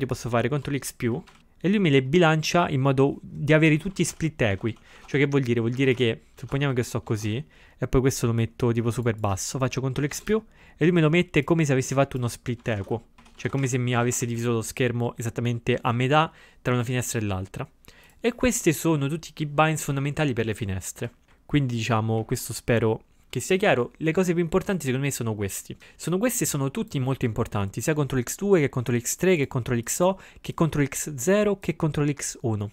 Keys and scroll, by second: 1.4 ctrl+x, 4.0 ctrl+x, 4.1-5.4 typing, 10.1 ctrl+x, 12.7-13.8 typing.